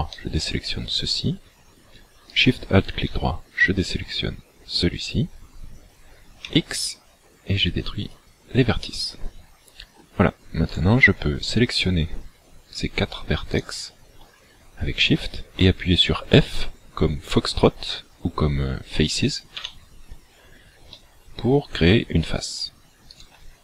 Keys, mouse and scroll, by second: 0.2 middle click, 2.3 alt+shift+right click, 6.5 x, 8.8 middle click, 10.7 right click, 11.8 shift+right click, 12.8 shift+right click, 13.6 shift+right click, 19.6 f, 21.0 middle click, 23.1 right click.